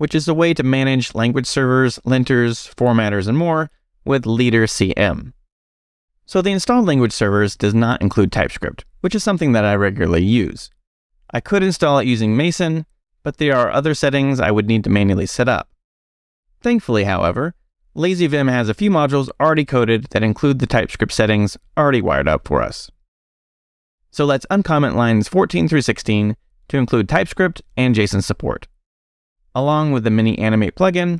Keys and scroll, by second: 1.9 c, 4.9 m, 14.3 q, 23.2-26.5 typing.